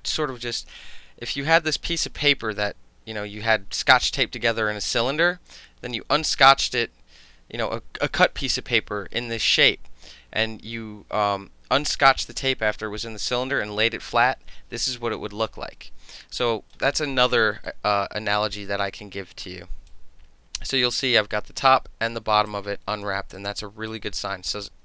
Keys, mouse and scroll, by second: 16.5 alt+click, 17.0 alt+middle drag, 17.2 alt+right click, 17.4 alt+middle click, 17.7 alt+middle click, 18.5-19.9 alt+drag, 22.5 alt+click, 23.4 alt+right click.